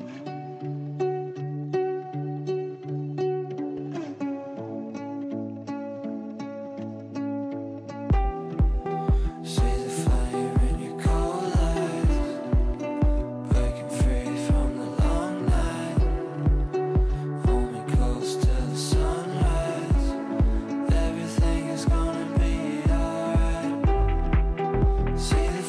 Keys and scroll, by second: 0.8 Right, 1.2 Down, 3.8 ctrl+z, 10.3 Delete.